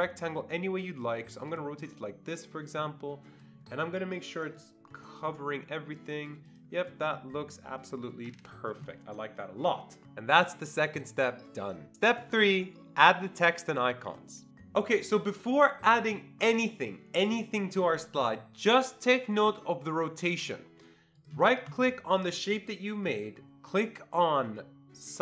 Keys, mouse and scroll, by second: 2.1-3.7 drag, 4.9 click, 6.5-7.5 drag, 7.5-8.3 ctrl+scroll up 1, 21.2 click, 21.7 right click.